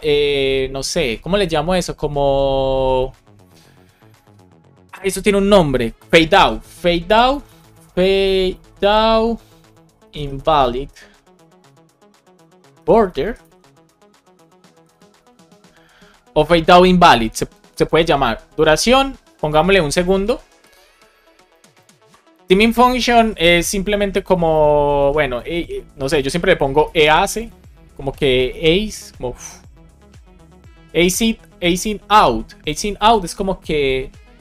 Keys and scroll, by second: 6.9 BackSpace, 8.5 shift+o, 9.8 shift+i, 12.8 shift+b, 14.4 BackSpace, 15.0 BackSpace, 18.1 Right, 20.6 Right, 21.4 Left, 21.7 Right, 22.5 alt+shift+Right, 24.7 shift+Left, 26.8 BackSpace.